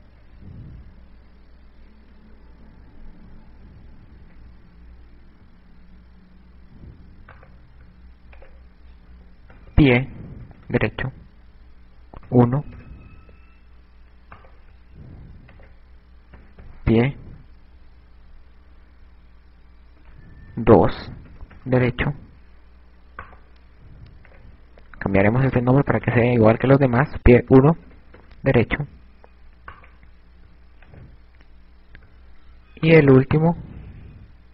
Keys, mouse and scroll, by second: 0.2 KP_Add, 0.9-1.8 shift+scroll down 4, 1.8-2.3 shift+scroll down 7, 7.7 right click, 9.1 click, 14.7 right click, 16.5 click, 23.7 right click, 24.8 click, 30.4 right click, 31.9 click, 33.9 KP_6.